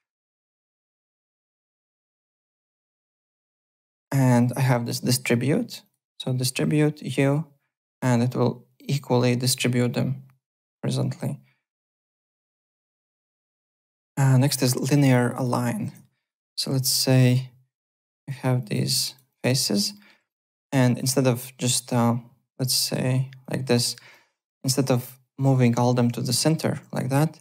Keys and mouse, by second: 5.8 click, 7.0 click, 13.4 alt+Tab, 13.9 alt+Tab, 14.7-16.5 typing, 14.8 click, 15.2 click, 16.2 click, 16.9 click, 17.8 click, 19.7 alt+right click, 19.9 alt+middle click, 20.4 click, 21.9 click, 23.4 click, 26.3 shift+w.